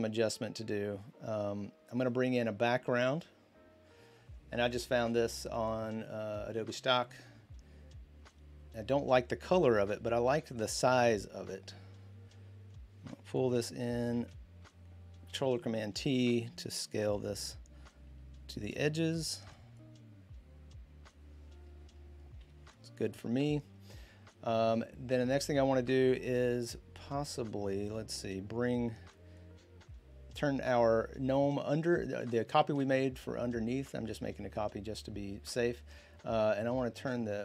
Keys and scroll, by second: 15.1 ctrl+t, 22.2 Return.